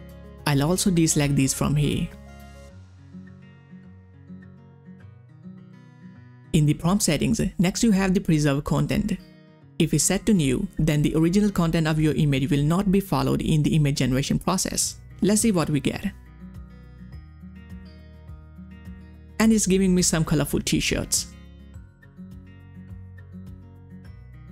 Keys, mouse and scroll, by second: 0.3-3.6 drag, 4.3 space, 4.4 click, 4.5 space, 6.3 space, 6.3 click, 16.2 click, 18.5 click, 18.5 click, 21.9 click, 22.0 click, 23.4 click, 23.4 click.